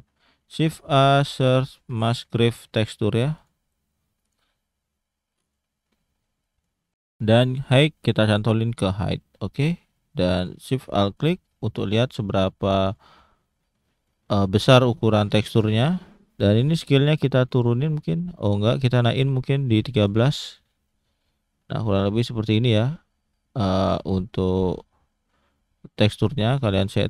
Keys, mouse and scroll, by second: 0.5 shift+a, 4.6-5.3 scroll up 1, 5.3 middle click, 5.8-6.4 scroll up 2, 6.4 middle click, 7.5 click, 9.0-9.7 scroll down 3, 9.7 middle click, 10.1-10.6 scroll up 2, 11.1 ctrl+shift+click, 12.9 click, 13.3-14.0 scroll down 5, 14.0 middle click, 14.5-15.1 scroll up 4, 15.2 middle click, 15.7-16.3 scroll up 1, 16.3-16.7 scroll down 1, 16.7 click, 18.9 click, 20.6-21.2 scroll down 1, 21.2 scroll up 1, 21.5 shift+middle click, 21.9-22.7 scroll up 1, 22.7-23.0 scroll down 1, 23.0 middle click, 25.0 scroll up 1, 26.3 middle click, 26.6-26.9 scroll up 1, 26.9 click.